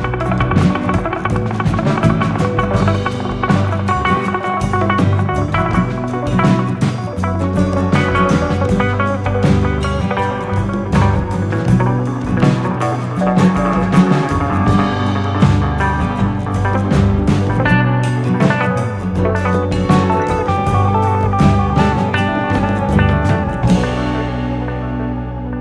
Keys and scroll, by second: 2.3 n, 8.9 ctrl+a, 11.1 Return, 18.3 s, 20.2-21.3 typing, 22.5 F10, 22.9 F11, 23.2 F9.